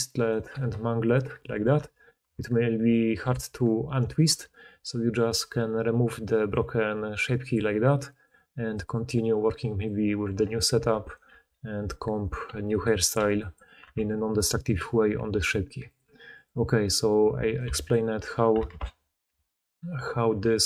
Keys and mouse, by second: 0.2 middle click, 0.4 g, 1.7 Tab, 2.1 Tab, 3.2 a, 4.2 Tab, 4.6-6.4 middle drag, 6.4-11.0 drag, 10.7 Tab, 11.0 click, 11.2 g, 12.0 middle click, 12.1 click, 12.2 middle click, 12.4 g, 12.9 click, 13.0-15.8 middle drag, 13.1 g, 13.8 Tab, 15.8-18.5 drag, 17.6 x, 18.7 ctrl+z, 18.8 click, 19.2 x, 19.8 click.